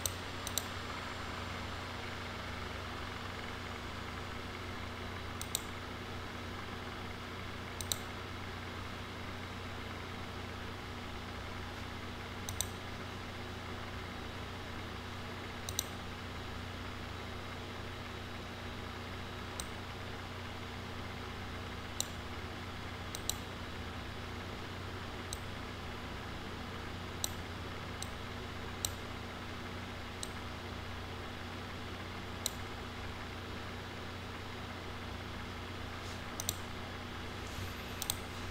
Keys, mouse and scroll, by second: 0.4 click, 5.4 click, 7.8 click, 12.4 click, 15.7 click, 19.6-22.0 drag, 23.1 click, 25.3-27.2 drag, 28.0-28.8 drag, 30.2-32.4 drag, 36.4 click, 38.0 click.